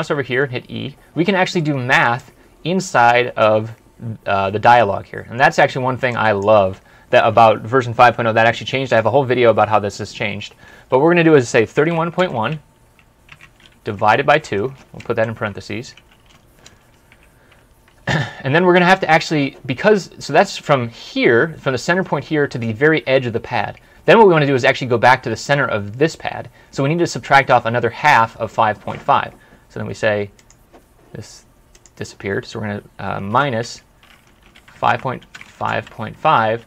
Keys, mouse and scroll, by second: 11.4-16.4 typing, 28.0 scroll up 1, 28.5 typing, 33.3-36.6 typing.